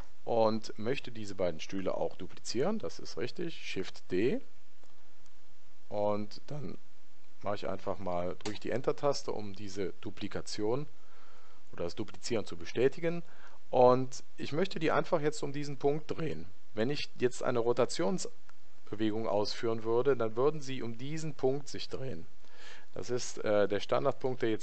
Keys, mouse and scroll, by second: 4.3 shift+d.